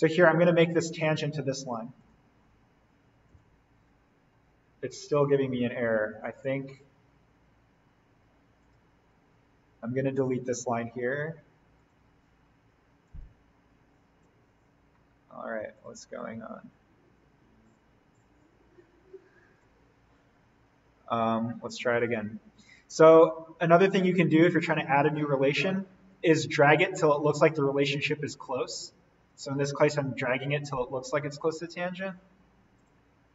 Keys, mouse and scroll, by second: 0.0 ctrl+click, 2.0 click, 3.9-4.4 scroll up 1, 4.8-5.3 scroll down 1, 6.3 click, 10.3 Delete, 11.8 click, 14.0 Delete, 14.8-15.6 scroll up 1, 15.8 click, 16.0-16.4 scroll up 1, 17.7-19.9 drag, 19.9-22.0 scroll down 1, 22.0 click, 23.4 scroll up 1, 23.5 click, 24.0-24.6 scroll up 1, 24.6 scroll down 1, 26.1-29.8 drag, 29.8 scroll down 1, 31.4 click, 32.8 ctrl+click.